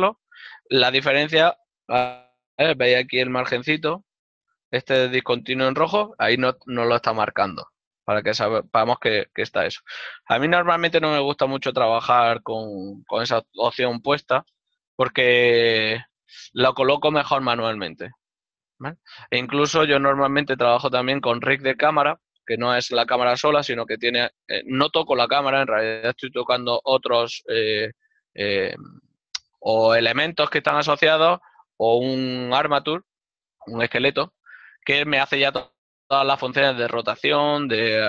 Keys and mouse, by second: 10.1 shift+middle click.